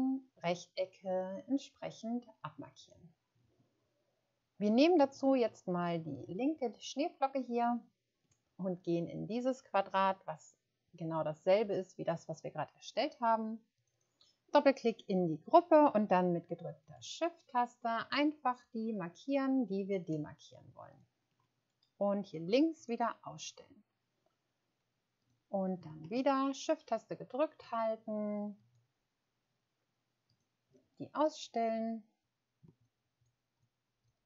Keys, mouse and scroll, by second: 5.1 shift+scroll up 1, 13.9 click, 19.0 shift+click, 20.0 shift+click, 26.0 shift+click, 26.8 shift+click, 32.8 shift+click, 33.2 shift+click, 34.0 shift+click.